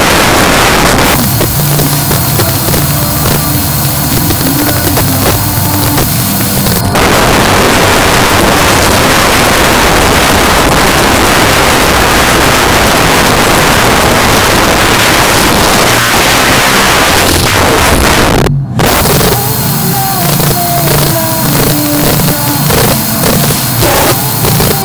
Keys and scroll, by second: 6.8 Page_Down.